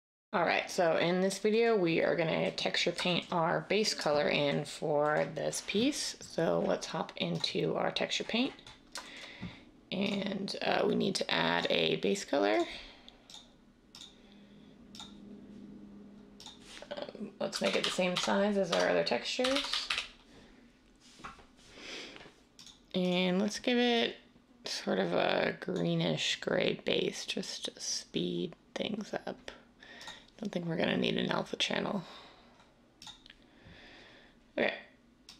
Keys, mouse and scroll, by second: 17.5-19.9 typing.